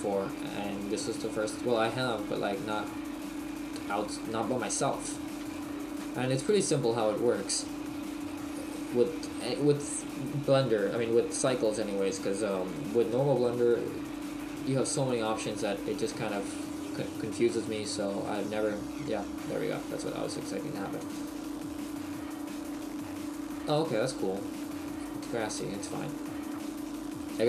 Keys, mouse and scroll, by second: 0.2 click.